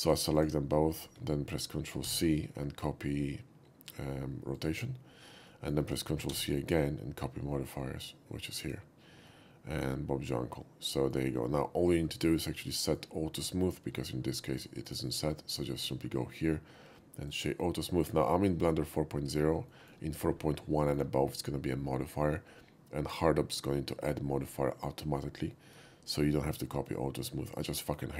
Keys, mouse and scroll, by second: 0.1 click, 0.4 shift+click, 2.0 ctrl+c, 4.6 click, 5.5 middle click, 6.4 ctrl+c, 8.7 click, 9.3-11.1 middle drag, 12.5-13.0 middle drag, 14.0-14.4 shift+middle drag, 14.9 shift+right click, 17.3 shift+click, 18.0 middle click, 19.7 shift+middle drag, 20.8 shift+middle click, 21.4-22.4 shift+middle drag, 25.5 shift+middle click, 26.1-26.9 shift+middle drag, 27.8 shift+middle click.